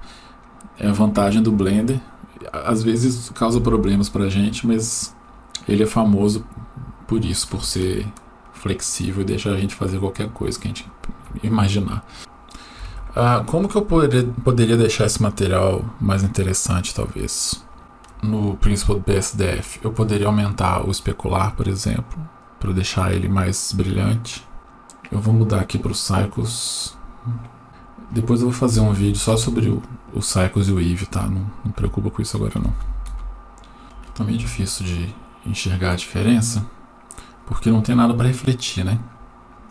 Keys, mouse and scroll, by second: 6.6-7.6 scroll down 1, 7.8-11.0 shift+middle drag, 17.4-18.0 scroll up 2, 17.8 shift+middle click, 18.4-20.1 scroll up 3, 20.6-23.8 drag, 24.6 middle click, 25.0-26.6 drag, 27.6-29.3 drag, 31.0-33.1 drag, 33.8 right click, 33.8 scroll down 4, 33.8 KP_7, 34.6 g, 38.3-39.2 middle drag.